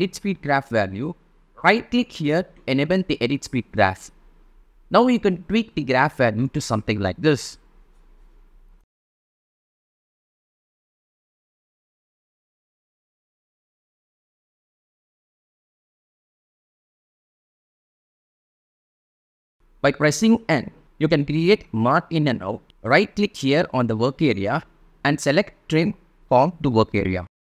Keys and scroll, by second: 13.1 shift+space, 14.7 space, 16.7 space.